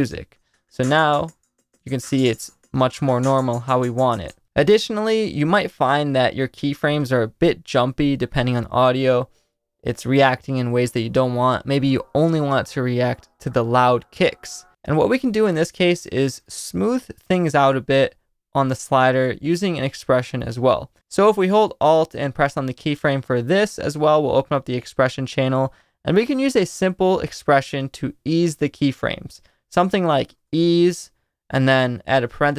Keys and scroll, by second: 0.0 space, 4.2 space, 8.5 space, 9.5 space, 29.8-31.1 typing, 32.2-32.5 typing.